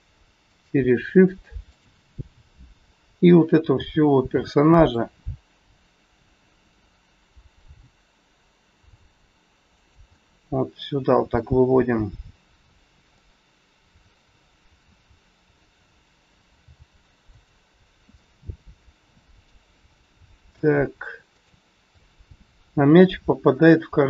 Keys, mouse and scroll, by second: 0.5 shift+click, 1.6 shift+click, 3.7 g, 10.2 middle click, 11.7-12.2 scroll up 1, 13.1 middle click, 13.1 scroll up 1, 15.6 scroll down 2, 16.6 g, 17.8 scroll down 1, 18.1 middle click, 19.9 middle click, 21.3 click, 21.9 middle click, 22.8-23.3 scroll up 2, 23.3 scroll up 2, 23.6 middle click.